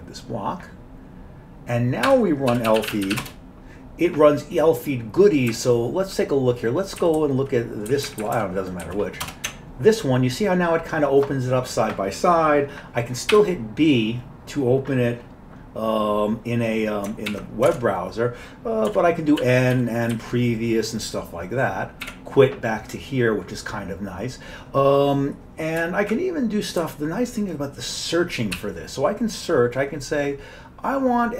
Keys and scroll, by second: 2.1 Escape, 2.3-3.7 typing, 5.5 Up, 6.0 Up, 7.0 Down, 7.2 Down, 7.3 Down, 8.0 Up, 8.1 Up, 8.2 Up, 8.4 Up, 8.9 Down, 9.3 Return, 13.3 b, 14.1 b, 17.3 ctrl+w, 17.7 alt+Tab, 18.7-20.7 typing, 22.1 typing, 25.8 Up, 26.8 Down, 28.6 s.